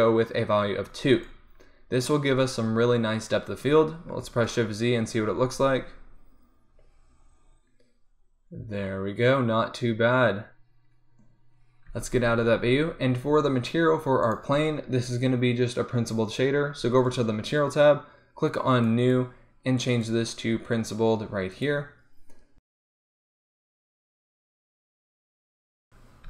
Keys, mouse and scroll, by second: 4.6 shift+z, 12.2 z, 13.3 z, 14.5-16.4 drag, 17.1-18.9 drag, 23.4 shift+z.